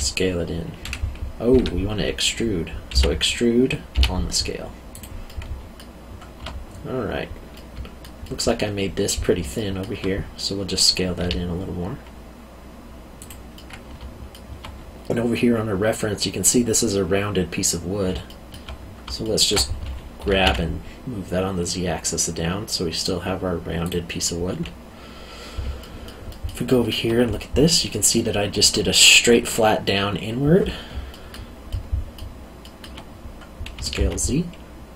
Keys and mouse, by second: 1.6 Escape, 2.9 e, 3.9 s, 4.9 click, 5.2 middle click, 7.5 middle click, 9.5 alt+middle click, 11.2 s, 13.2 click, 13.5 middle click, 18.3 alt+middle click, 19.2 alt+middle click, 20.2 g, 20.4 z, 23.8 click, 25.8 alt+middle click, 31.1 alt+middle click, 33.7 s, 33.9 z.